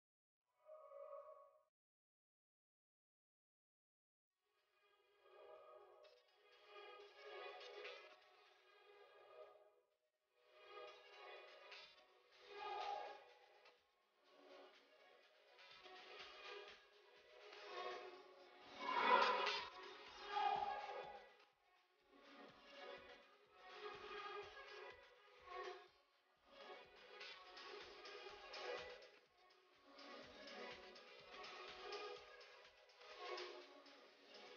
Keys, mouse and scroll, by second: 4.7 s, 6.1-10.7 drag, 10.8-11.9 scroll down 1, 11.9-19.2 drag, 20.8 click, 26.5 click, 29.4 click, 32.1 click.